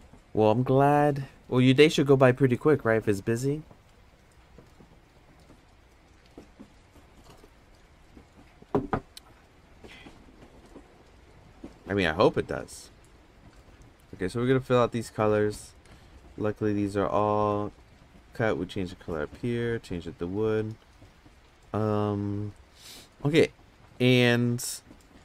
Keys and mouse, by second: 12.4 click, 15.8 ctrl+z, 15.9 click, 18.5-19.3 drag, 19.7 click.